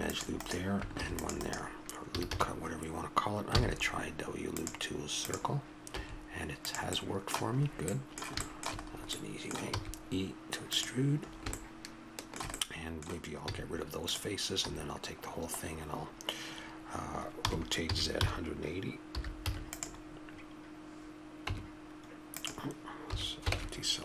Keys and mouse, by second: 2.1 a, 2.3 a, 3.6 w, 6.0 s, 9.7 e, 13.5 x, 14.6 a, 17.4 r, 20.9 r, 21.5 Tab, 23.1 a, 23.5 ctrl+Tab.